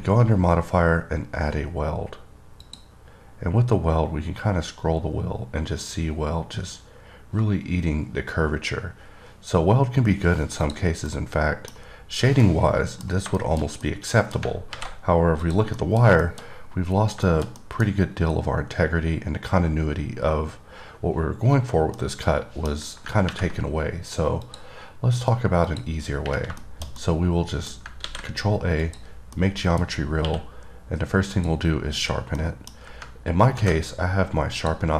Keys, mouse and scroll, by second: 2.9 click, 3.7-6.2 scroll up 10, 6.2-7.0 scroll down 3, 7.0-7.7 scroll up 2, 7.7-8.2 scroll up 1, 8.2-9.3 scroll down 3, 9.3-9.9 scroll up 1, 9.9-10.2 scroll down 1, 10.2-10.9 scroll up 1, 10.9 click, 11.3 middle click, 12.7 middle click, 13.6 middle click, 14.1 middle click, 15.6 click, 16.0 middle click, 16.4 middle click, 16.7-17.4 scroll up 2, 17.5 middle click, 17.8 double middle click, 22.2 middle click, 24.7 click, 25.9 click, 26.8 middle click, 27.2 double middle click, 29.0 click, 29.6 middle click, 31.6 click, 32.6 middle click, 34.8 click.